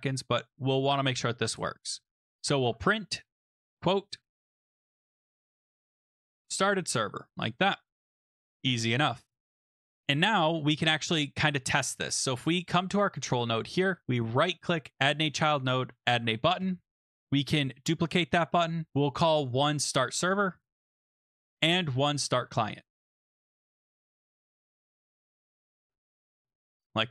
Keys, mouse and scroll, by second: 1.4 Return, 2.2-7.9 typing, 7.4 Right, 8.1 Down, 9.3 Return, 10.0 BackSpace, 10.8 click, 10.9 ctrl+s, 12.5 click, 13.5 click, 14.4 right click, 15.0 click, 15.5-16.7 typing, 17.7 ctrl+d, 17.7 typing, 19.0 click, 19.1 click, 19.5 click, 19.7 click, 19.9-26.2 typing, 21.8 click, 21.9 click, 26.4 Return.